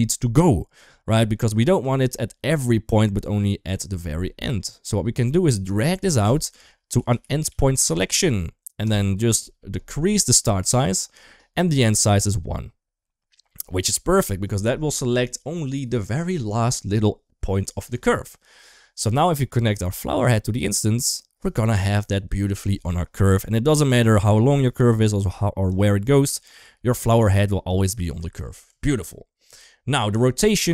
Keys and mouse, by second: 5.8 click, 6.0-8.8 drag, 10.5 click, 19.6-20.6 drag, 23.1 Tab, 23.6 click, 24.9 ctrl+z, 25.0 click, 26.5 ctrl+z, 26.8 click, 28.2 ctrl+z, 28.4 Tab, 29.4 Tab.